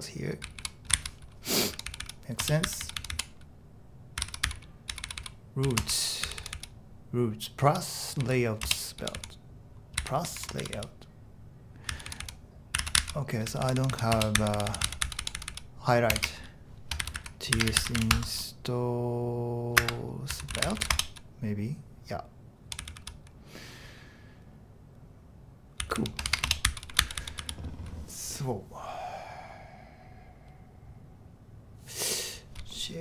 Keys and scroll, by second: 0.2-6.6 typing, 7.7-9.2 typing, 10.2 ctrl+d, 10.4 ctrl+d, 10.8 typing, 11.9-18.5 typing, 19.8-21.4 typing, 22.6-23.5 typing, 25.6-27.9 typing.